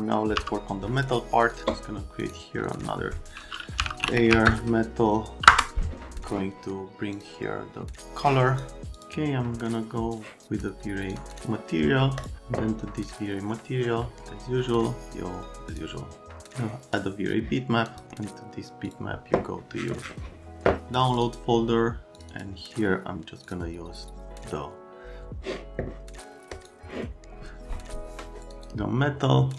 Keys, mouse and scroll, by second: 0.4 m, 1.5 click, 3.5-4.9 typing, 5.5 Return, 7.2 click, 8.2 click, 8.9 click, 10.2 click, 11.1 middle click, 11.3 middle click, 12.2 middle click, 15.7 click.